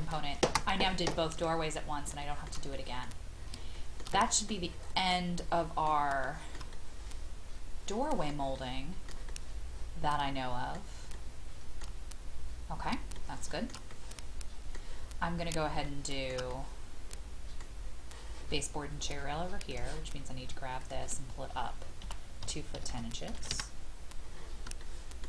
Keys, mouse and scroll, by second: 1.3 click, 1.7-2.0 scroll down 1, 2.2 shift+middle click, 3.0 scroll down 1, 3.7 shift+middle click, 4.2 middle click, 4.8 scroll up 1, 5.4 middle click, 6.2-11.1 shift+middle drag, 13.1 shift+middle click, 13.9 middle click, 15.0 scroll up 1, 15.8 shift+middle click, 16.5-17.6 middle drag, 17.8 scroll up 1, 19.7 click, 22.0 KP_2, 22.7 KP_1, 22.9 KP_0, 23.5 Return, 24.2-24.6 scroll down 1, 24.8 shift+middle click.